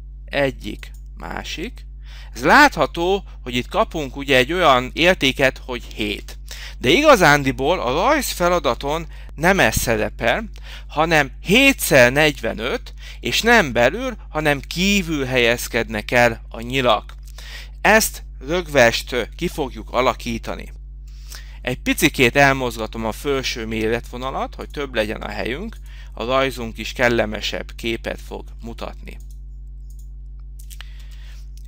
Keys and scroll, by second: 18.1 Right, 19.8 x, 23.5 4.